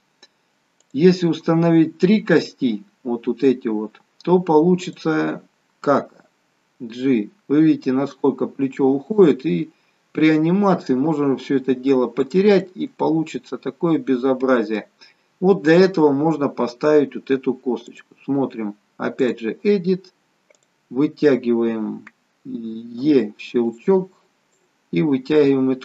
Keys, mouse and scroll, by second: 0.9 click, 2.1 scroll down 2, 3.9 scroll down 1, 4.9 click, 6.2 g, 12.8 middle click, 18.0 click, 21.1 click, 23.2 e, 24.6 click.